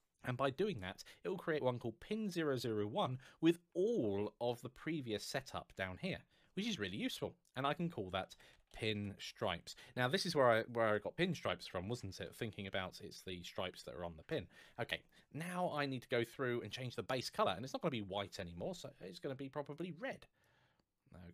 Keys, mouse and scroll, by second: 0.5 click, 3.2 scroll down 1, 5.5 scroll up 1, 7.2 click, 8.1 shift+p, 8.4 n, 8.7 space, 9.0 shift+s, 10.6-12.5 typing, 14.0 Return, 15.2-15.5 scroll down 1, 16.9 click, 19.5 click.